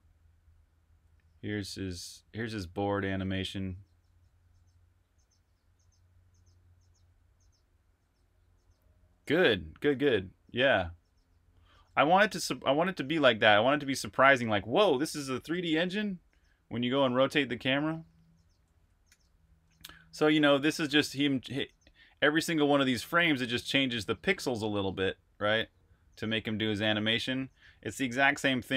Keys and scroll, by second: 18.9 super+t, 27.8 super+Tab.